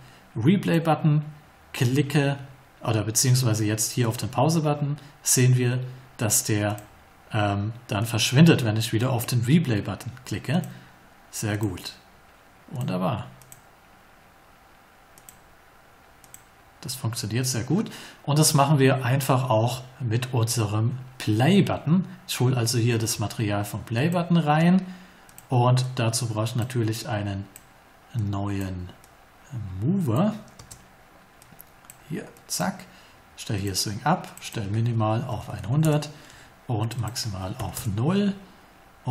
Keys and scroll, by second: 30.5 space, 35.2 1, 35.7 0, 35.8 Return, 37.5 0, 37.7 Return.